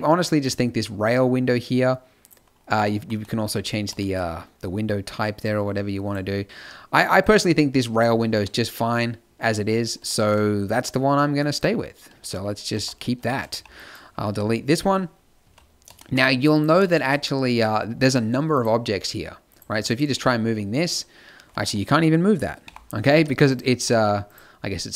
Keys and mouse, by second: 2.5-5.3 middle drag, 5.3-8.9 drag, 12.7 a, 13.3 z, 13.5 b, 14.3 x, 15.4 z, 16.6-17.6 drag, 17.9 z, 20.1 g, 22.6 g, 23.5-24.9 drag.